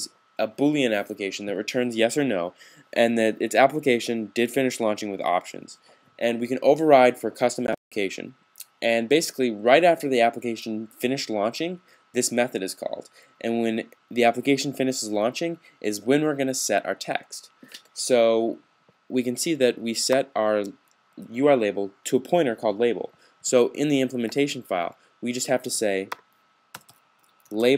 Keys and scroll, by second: 27.0-27.7 typing.